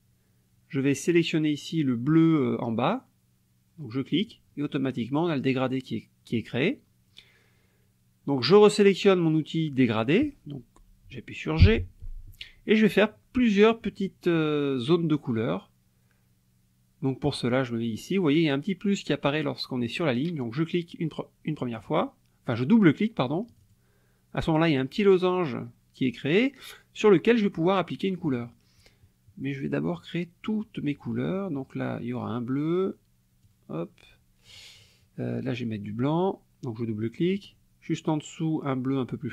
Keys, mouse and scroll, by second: 4.2 click, 11.6 g, 21.8 click, 23.5 click, 33.5-34.7 drag, 37.2 click.